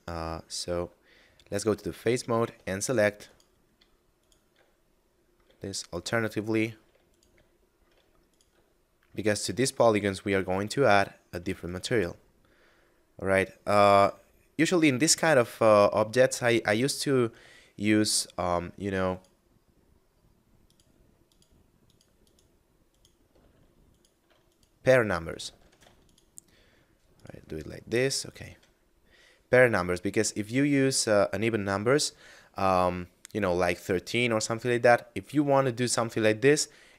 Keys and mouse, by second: 1.9 middle click, 3.1 alt+right click, 4.0 alt+shift+right click, 4.6 shift+middle click, 5.7 alt+shift+right click, 6.2 shift+middle click, 6.9 alt+shift+right click, 7.4 shift+middle click, 8.1 alt+shift+right click, 8.6 shift+middle click, 9.3 alt+shift+right click, 9.7 shift+middle click, 10.6 alt+shift+right click, 11.0 shift+middle click, 11.5 alt+shift+right click, 12.0 shift+middle click, 16.2 middle click, 18.8 alt+shift+right click, 20.6 alt+shift+right click, 21.1 alt+shift+right click, 21.7 alt+shift+right click, 22.2 alt+shift+right click, 22.7 alt+shift+right click, 23.8 alt+shift+right click, 24.3 right click, 25.3 ctrl+z, 25.9 shift+right click, 27.0 shift+right click, 27.8 shift+middle click, 28.6 middle click, 35.7 shift+middle click.